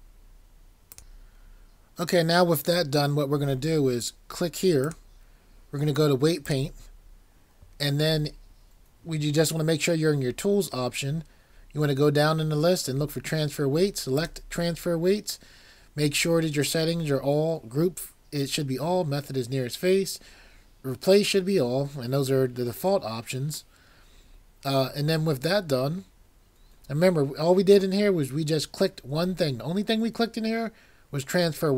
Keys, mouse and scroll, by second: 0.9 click.